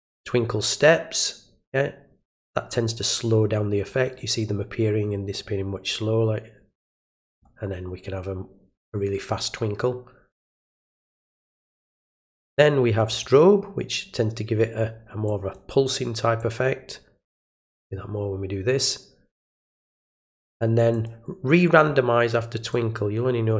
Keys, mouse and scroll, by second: 0.0-0.6 drag, 6.9 click, 13.1 click, 15.2 drag, 16.4 drag, 17.6 drag, 20.9 click, 22.7-23.1 drag.